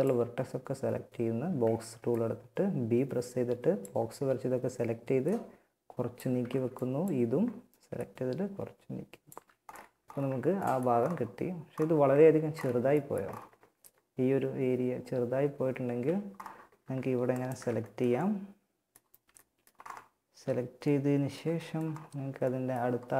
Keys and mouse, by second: 0.9 b, 4.5 click, 5.5 a, 5.7 b, 7.2-8.9 drag, 8.5 z, 9.0 Tab, 14.4 Tab, 15.0 z, 16.5 click, 18.3 z, 19.5 z, 21.8-23.1 drag.